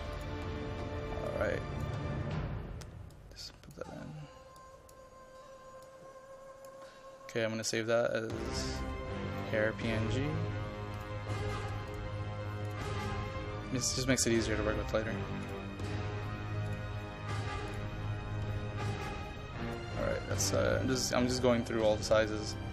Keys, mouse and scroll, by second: 0.2-22.7 drag.